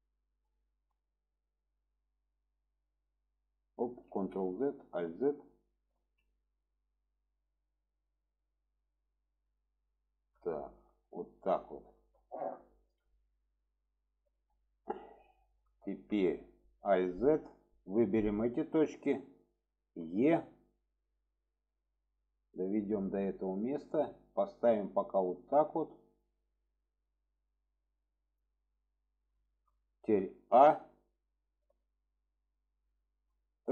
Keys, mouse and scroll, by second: 0.3 shift+middle drag, 1.4 click, 2.4-3.7 drag, 4.1 ctrl+z, 4.8 alt+z, 5.4 click, 5.9 alt+z, 6.6-9.4 drag, 10.5 shift+middle drag, 11.7 shift+middle drag, 12.8-14.6 middle drag, 15.8 shift+middle click, 16.9 alt+z, 17.6-18.3 drag, 19.9 e, 23.7 drag, 24.3-25.4 drag, 26.1 drag, 26.9-28.4 drag, 29.3 shift+middle drag, 31.0-32.1 middle drag, 32.9 middle click.